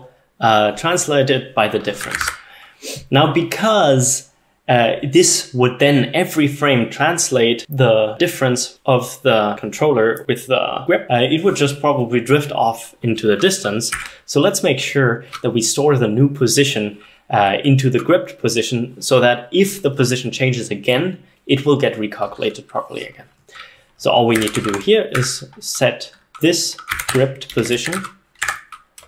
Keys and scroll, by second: 1.8-2.6 typing, 24.3-25.3 typing, 26.7-29.0 typing, 28.5 Tab.